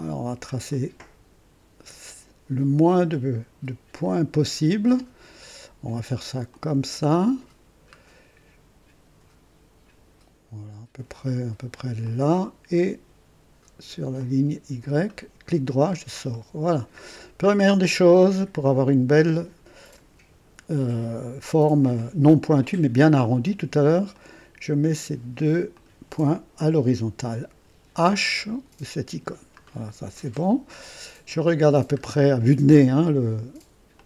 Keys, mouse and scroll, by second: 0.7-1.5 right drag, 4.0 click, 6.5 click, 7.4-7.7 scroll down 1, 12.0 click, 14.1 click, 15.1 right click, 15.9-16.2 scroll up 1, 16.3-16.8 right drag, 17.0 scroll up 1, 17.4-17.9 right drag, 18.1 right click, 24.1 click, 25.7 click, 27.9 typing, 29.6-29.9 scroll down 2, 30.1-30.6 right drag, 30.8-31.1 scroll down 1, 31.3-31.8 right drag, 32.0 scroll up 1, 32.6 scroll down 1, 33.9-34.0 drag.